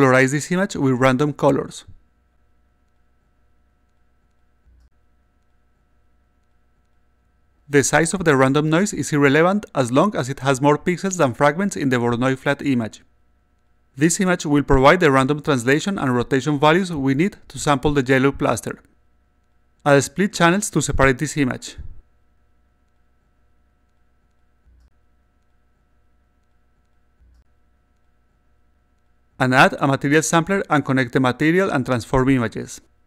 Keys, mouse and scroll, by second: 0.2-1.8 drag, 3.1 click, 5.3 click, 6.6 click, 7.4 d, 10.7 click, 11.6 click, 12.5 click, 19.9 click, 20.9-22.1 drag, 22.7 click, 24.0 click, 25.2 click, 25.8 click, 26.5 click, 27.1 click, 27.3 click, 29.9 click, 31.5 click, 31.9 click.